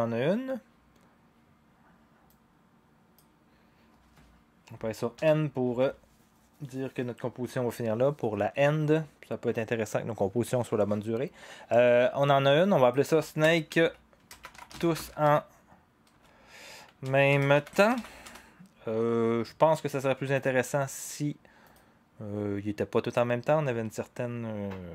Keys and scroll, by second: 5.1 n, 13.4 Return, 13.7 Tab, 14.2-18.4 typing.